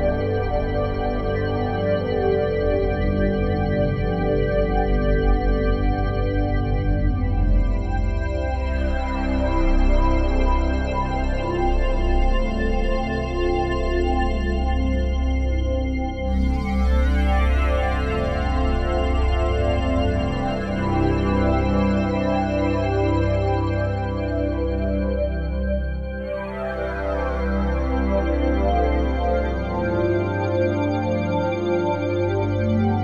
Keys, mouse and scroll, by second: 1.8 click, 3.7 middle click, 3.7 scroll down 1, 4.0-8.3 drag, 9.0 click, 9.7 click, 10.3-13.3 middle drag, 10.3-11.3 scroll down 1, 11.3-13.3 scroll down 1, 13.5 middle click, 13.8-14.4 scroll down 1, 14.6-22.7 drag, 23.7 super+d, 29.3 click, 30.3-31.3 drag, 31.4-33.0 drag.